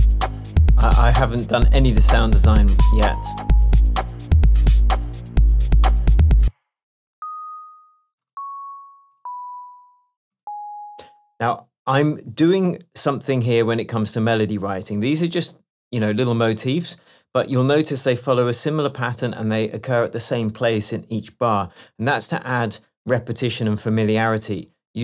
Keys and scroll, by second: 6.5 space.